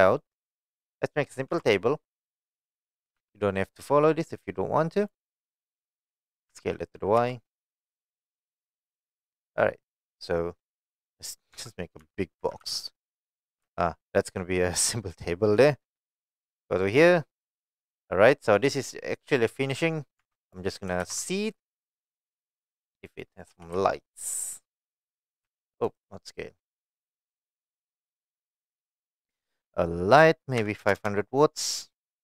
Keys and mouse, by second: 0.0 click, 1.5 shift+a, 3.2 s, 5.0 click, 5.5-5.8 middle drag, 6.5 s, 7.2 y, 8.0 click, 8.3-9.0 middle drag, 10.4-10.8 middle drag, 11.2 middle click, 11.5 Tab, 12.0 a, 12.4 e, 12.6 z, 13.6 z, 14.1 click, 14.4 middle click, 15.6 middle click, 16.9 click, 17.4 middle click, 18.5 shift+middle click, 20.2 Tab, 20.4 click, 21.0 shift+a, 23.5 g, 23.7 z, 24.9 click, 25.4 s, 25.8 right click, 28.4-32.1 drag, 31.0 KP_0.